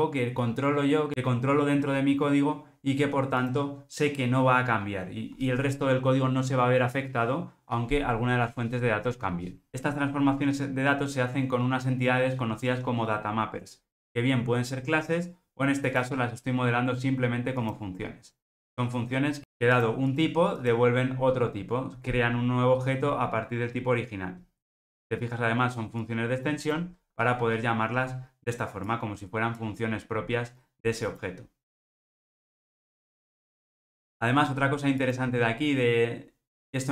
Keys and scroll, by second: 26.9 alt+super+[, 32.4 alt+super+[.